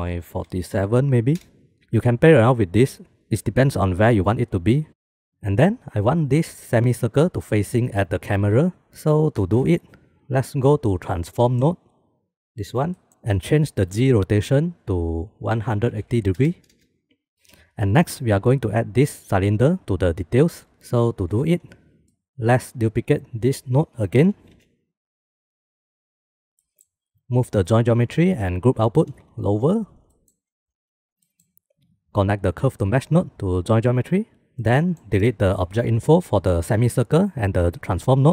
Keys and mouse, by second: 2.5-4.3 drag, 10.6 middle click, 11.1 middle click, 11.7 middle click, 12.4 middle click, 12.5 click, 14.6-17.3 drag, 17.3 ctrl+s, 22.3 middle click, 23.0 click, 24.7 shift+d, 27.0 click, 27.7-28.5 drag, 29.3 g, 30.4 click, 31.6 middle click, 32.6 click, 33.4-34.4 drag, 35.0 middle click, 35.2 click, 36.2 click, 37.9 click.